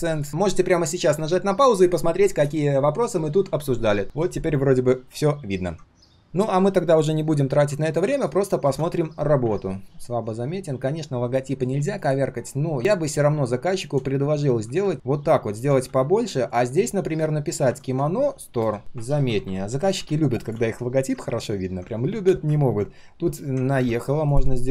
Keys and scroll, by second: 9.4 ctrl+\.